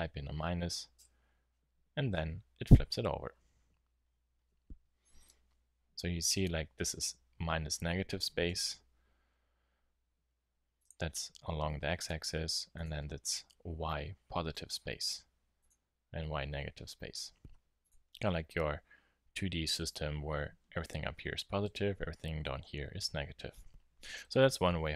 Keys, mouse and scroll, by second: 8.4 KP_7, 9.2-10.8 middle drag, 9.2-10.8 scroll down 1, 10.8-11.9 drag.